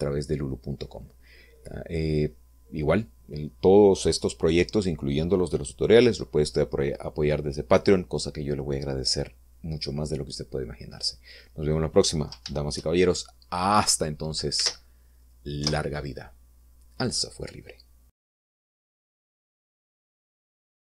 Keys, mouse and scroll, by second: 15.9 ctrl+s, 16.9 Return.